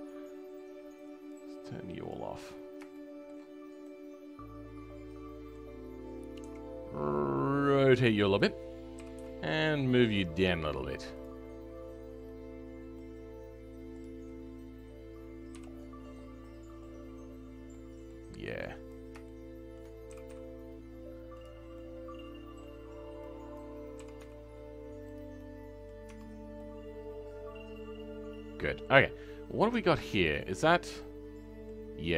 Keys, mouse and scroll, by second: 2.3-2.9 scroll up 2, 2.9 shift+middle click, 3.4-3.8 scroll up 2, 3.8-6.3 middle drag, 6.3 r, 12.2-13.9 middle drag, 13.9 click, 14.2-15.1 scroll down 3, 15.5 KP_5, 15.8-17.0 middle drag, 17.0 scroll up 2, 17.7-18.8 right drag, 17.7 middle click, 18.8 click, 19.2 right click, 19.2 shift+middle click, 20.1 g, 21.7-23.5 right drag, 21.7 middle click, 23.5 click, 25.3 right click, 25.3 middle click, 26.0 Tab, 26.2-26.5 scroll down 2, 26.5-29.0 right drag, 26.5 middle click, 29.0-29.6 scroll up 2, 29.6 Tab, 30.0-32.1 shift+middle drag.